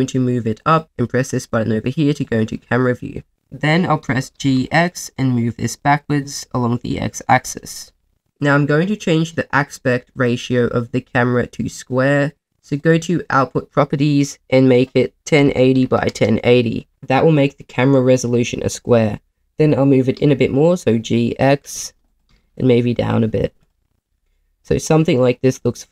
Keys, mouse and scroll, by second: 0.6 click, 2.2 click, 4.0 g, 4.4 x, 8.1 click, 12.8-16.1 drag, 19.5 g, 20.1 x, 22.1 click, 22.3 g, 22.3 z, 23.6 click.